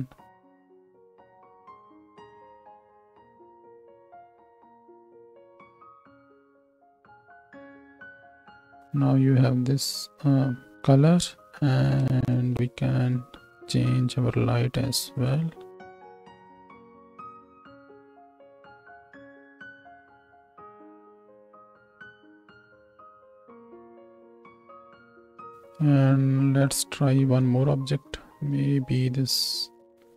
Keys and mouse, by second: 8.5 ctrl+space, 11.5 space, 12.2 ctrl+space, 16.1-18.5 drag, 19.7 g, 22.3 shift+Right, 22.5 shift+Left, 22.5-25.4 typing, 25.9 ctrl+space, 28.3 shift+a.